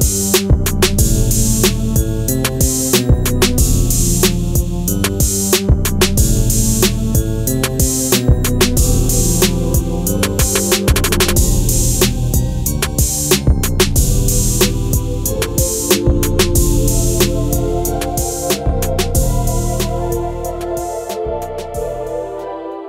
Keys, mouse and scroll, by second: 1.0 click, 8.1 click, 14.4 click, 16.5 scroll down 1, 18.7 click, 19.4 ctrl+s, 20.5 ctrl+s, 22.1 click.